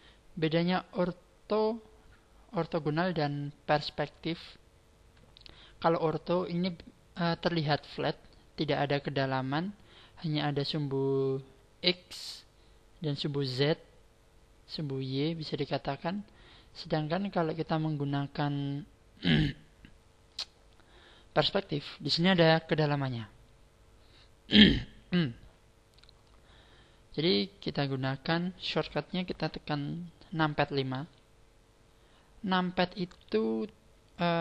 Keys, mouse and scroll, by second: 3.7-5.5 scroll up 4, 5.5 scroll up 1, 16.0 click, 30.9 KP_5.